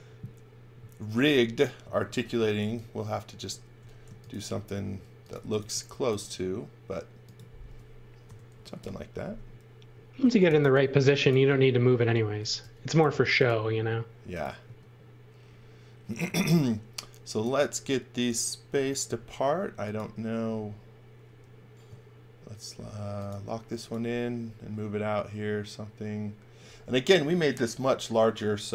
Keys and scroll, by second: 2.1-3.8 typing, 5.1-6.2 typing, 8.2-11.1 typing, 8.7 Return, 12.6 t, 14.6 space, 15.8-16.8 typing, 19.1 m.